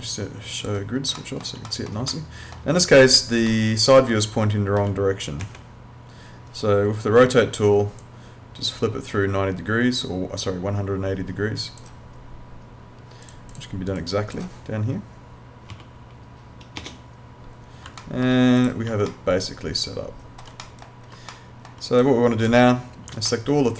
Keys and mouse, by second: 1.2 alt+middle click, 2.1 alt+middle click, 3.0 click, 3.5 alt+middle click, 5.4 e, 8.0 click, 13.2 click, 15.7 9, 16.0 0, 18.0 alt+middle click, 18.6 click, 19.1 alt+middle click, 20.7 middle click, 21.3 alt+middle click, 22.0 click, 23.3 alt+middle click.